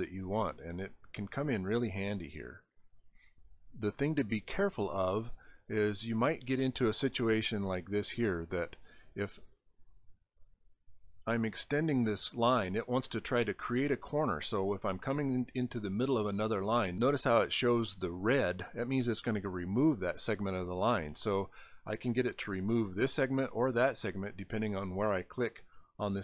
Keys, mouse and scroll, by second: 0.1 click, 1.7 click, 3.2 scroll up 2, 5.2 click, 6.5 click, 7.5 click, 9.8 click, 11.1 scroll down 4, 12.5 click.